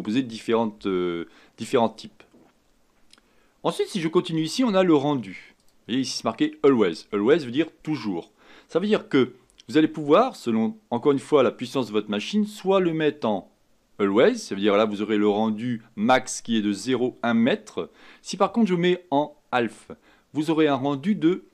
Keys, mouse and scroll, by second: 5.6 click.